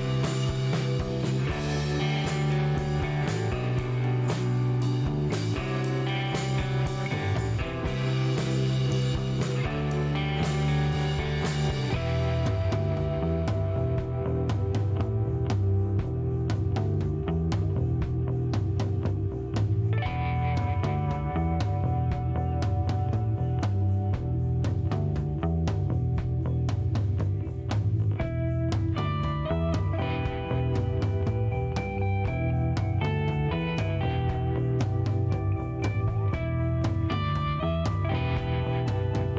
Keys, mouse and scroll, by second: 0.3 click, 1.2 click, 2.2 click, 3.1 click, 4.7 click, 5.1 right click, 5.7 click, 8.1 click, 9.2 click, 10.6 click, 11.3 middle click, 11.9 click, 13.6 click, 14.4 scroll down 1, 14.7 middle click, 17.6 click, 19.1 click, 20.6 click, 24.1 middle click, 25.6 click, 26.7-28.3 drag, 31.0 click, 31.9 scroll down 1, 32.4 middle click, 35.0 click, 37.8 click, 37.9 space, 38.6 shift+right click.